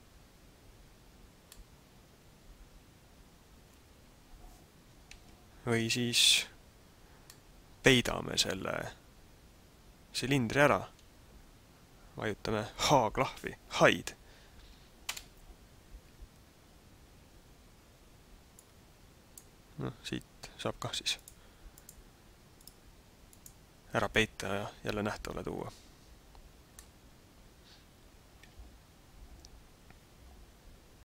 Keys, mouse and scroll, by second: 1.4 middle click, 5.1 ctrl+z, 7.3 middle click, 15.0 h, 18.6 click, 21.1 click, 21.7 click, 22.6 click, 23.4 click, 26.0-26.6 scroll up 4, 26.7 middle click.